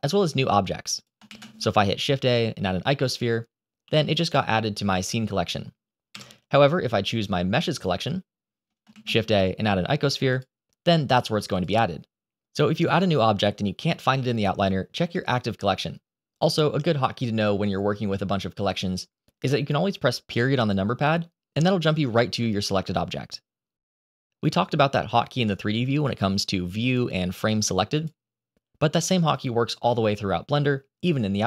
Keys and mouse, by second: 0.8 click, 1.1 shift+a, 3.7 g, 4.1 click, 6.0 Delete, 7.6 click, 8.8 shift+a, 11.0 g, 16.3 click, 17.3 click, 21.4 KP_Decimal, 25.5-27.9 drag.